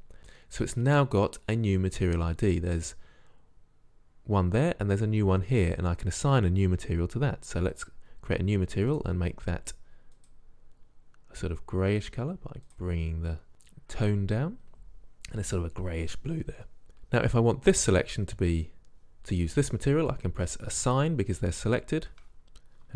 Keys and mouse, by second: 7.9-10.9 drag, 14.8-16.6 drag, 21.0-22.9 drag.